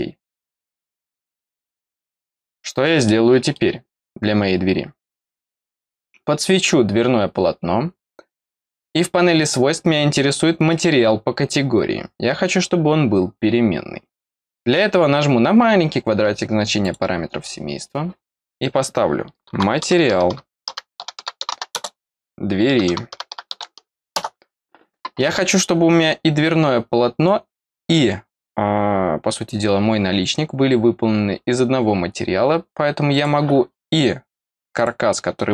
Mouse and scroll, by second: 1.5 click, 3.0 middle click, 5.4 click, 33.0 click, 34.7 click.